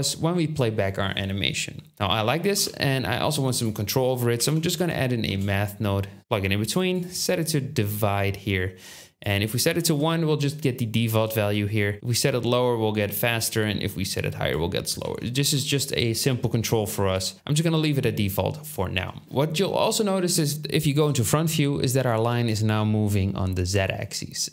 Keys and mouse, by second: 2.5 shift+a, 5.7-7.4 drag, 5.7 middle click, 5.7 right click, 7.0-7.4 middle drag, 7.0-7.4 right drag, 15.0 ctrl+z, 18.3-19.2 middle drag, 19.2-20.7 drag, 19.2 g, 20.9 KP_1.